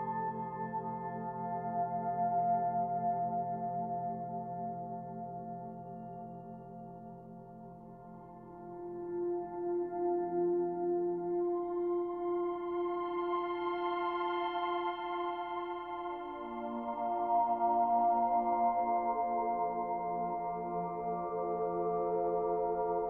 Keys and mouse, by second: 0.0 space, 0.9 ctrl+s, 2.9-3.8 drag, 4.1 ctrl+alt+click, 6.7 space, 7.6 alt+click, 9.6 click, 12.1 alt+click, 17.3 click, 19.9 middle click, 20.1 right click, 20.8-21.8 drag, 22.5 alt+click.